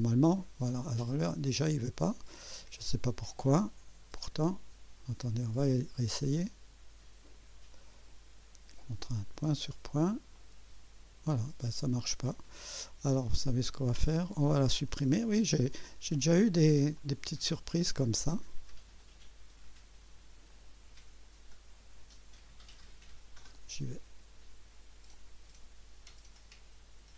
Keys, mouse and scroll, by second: 2.0 click, 4.1-5.1 drag, 6.4 click, 7.3 click, 10.3 click, 12.1 click, 14.1 click, 15.1 Delete, 17.0 click, 19.0 click, 20.5 right click, 23.4 click, 25.1 click.